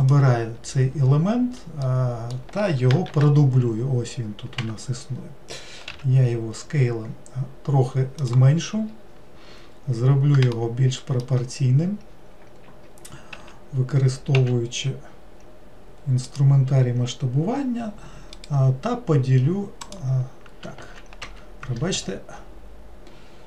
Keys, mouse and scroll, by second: 0.0 click, 1.8-3.1 middle drag, 3.1 shift+d, 5.9 s, 8.7-9.6 scroll up 4, 9.6-10.6 scroll up 3, 10.6-11.8 shift+middle drag, 11.8-13.3 scroll up 1, 13.3 s, 18.4-21.5 right drag.